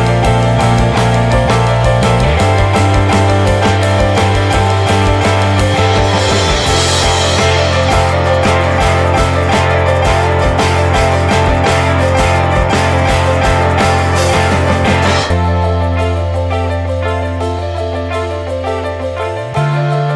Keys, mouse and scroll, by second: 1.5 scroll down 1, 1.6-2.9 scroll up 4, 1.8 alt+middle click, 2.2 shift+middle click, 2.6 shift+middle drag, 2.9-4.0 shift+middle drag, 4.0 r, 7.4 alt+middle drag, 8.1 shift+middle click, 8.6 scroll down 2, 8.8 click, 9.1 shift+middle click, 9.2 scroll up 1, 9.4 ctrl+s, 9.7 drag, 10.0 Tab, 10.1 scroll down 1, 10.3 shift+middle click, 11.0 scroll up 3, 11.2 click, 11.7 shift+middle click, 12.1 click, 12.7 click, 13.1 scroll down 2, 13.3 shift+middle click, 13.9 click, 15.9 shift+middle click, 16.1 scroll up 1, 16.2 click, 16.8 click, 17.6 alt+s, 18.7 shift+middle click, 18.9 scroll up 1, 19.1 click, 20.0 click.